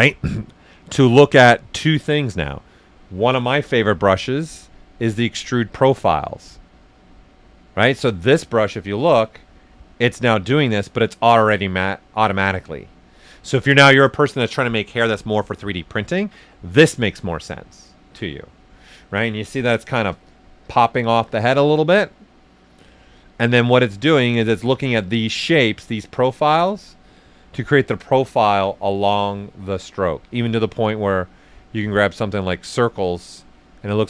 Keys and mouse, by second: 3.7 e, 7.7 click, 10.0-19.6 right drag, 19.6 click, 22.9 right click, 24.5 click, 27.3 ctrl+right click, 29.0 click, 33.1 right click.